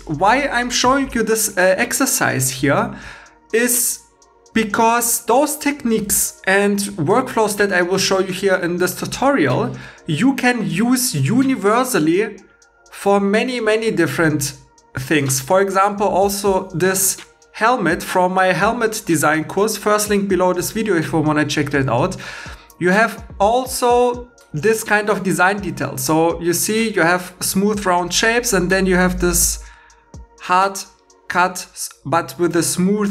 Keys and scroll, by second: 0.8 h.